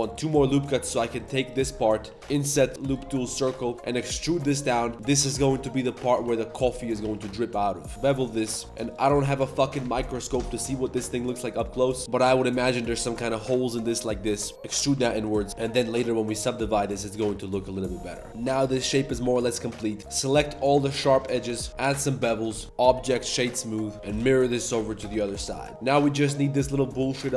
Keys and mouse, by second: 0.3 3, 0.5 click, 1.1 click, 1.4 ctrl+shift+click, 1.6 click, 2.0 i, 2.2 ctrl+z, 2.2 w, 2.5 w, 3.6-7.0 typing, 6.7 click, 8.5 right click, 9.2 z, 9.3 middle click, 9.8 middle click, 10.1 z, 11.5 middle click, 11.9 middle click, 12.0 b, 12.0 i, 13.0-13.4 middle drag, 13.4 click, 13.8 middle click, 14.5 alt+s, 14.5-17.1 typing, 14.9 Tab, 15.2 middle drag, 15.5 Tab, 15.5 alt+click, 15.8 alt+shift+click, 17.5 click, 18.3 Tab, 18.4 middle click, 18.6 middle click, 18.9 Tab, 19.0 middle click, 19.2 2, 19.5 alt+click, 20.0 shift+g, 21.2 alt+shift+click, 21.4 shift+g, 21.7 ctrl+b, 21.7 z, 22.5 Tab, 22.6-23.3 drag, 23.5 drag, 23.9-25.7 typing, 25.3 Tab, 25.4 drag, 25.7 ctrl+alt+shift+c.